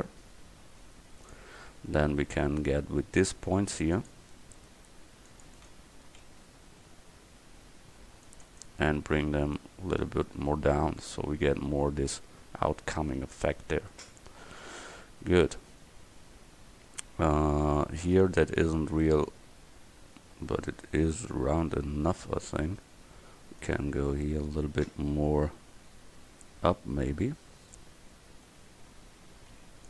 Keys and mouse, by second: 1.8-5.5 middle drag, 2.3 a, 3.2 c, 7.7 c, 8.5-11.1 drag, 18.7 Tab, 22.9 Tab, 26.3 a, 26.7 middle click, 27.2 middle click, 28.3 f, 29.7 c.